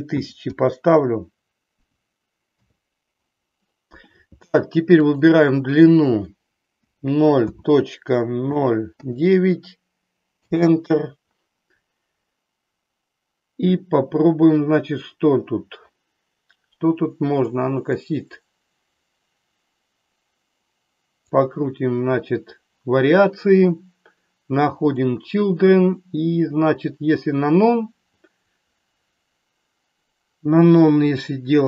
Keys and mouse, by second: 0.3 KP_0, 5.1-11.2 drag, 18.1-21.3 drag, 24.7 click.